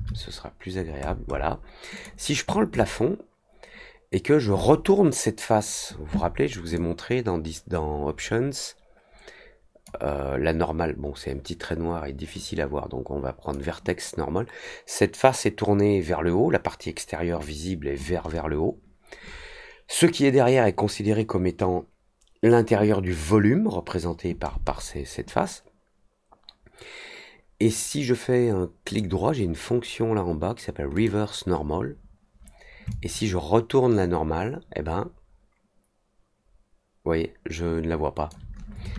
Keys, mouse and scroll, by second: 0.7 middle click, 1.0 middle click, 1.2 middle click, 1.9 click, 6.7-9.8 drag, 12.3-13.5 drag, 30.9 click, 32.8-38.2 alt+drag.